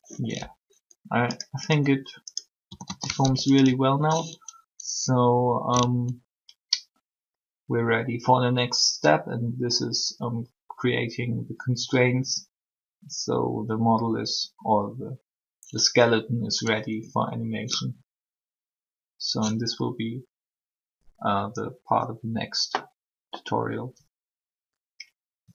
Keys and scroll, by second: 2.6 typing, 3.2 alt+r.